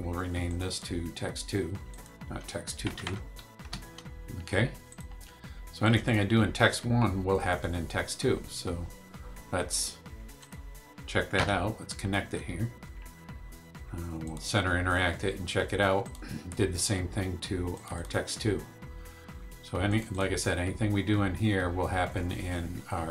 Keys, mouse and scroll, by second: 0.5 click, 1.9 click, 2.8 BackSpace, 3.6 Return, 4.9 click, 5.8 click, 10.4 click, 11.3 1, 14.2 click, 16.0 click, 17.7 click, 19.9 click.